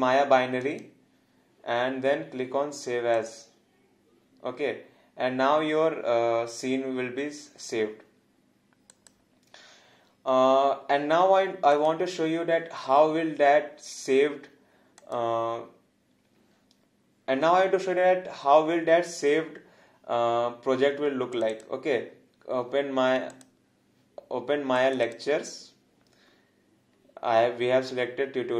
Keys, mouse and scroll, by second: 0.6 click, 3.1 click, 8.9 click, 11.8 click, 15.0 click.